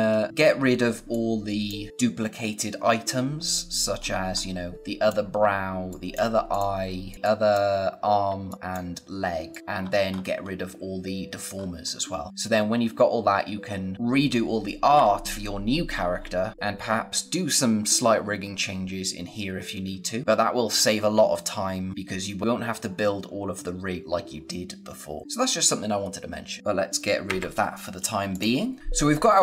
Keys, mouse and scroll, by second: 0.8 space, 1.0 click, 1.3 space, 1.9-2.4 scroll up 1, 2.7-3.4 scroll down 1, 3.9-4.7 scroll up 1, 4.7 click, 5.3-5.6 scroll down 1, 5.6-8.6 typing, 5.8 click, 6.4 click, 7.0 click, 7.9 scroll down 1, 8.4 click, 9.4 click, 9.6-11.4 scroll up 1, 11.4-12.3 scroll down 1, 21.9 scroll down 1, 21.9 scroll up 1, 25.2 click, 26.6 click, 28.2 click.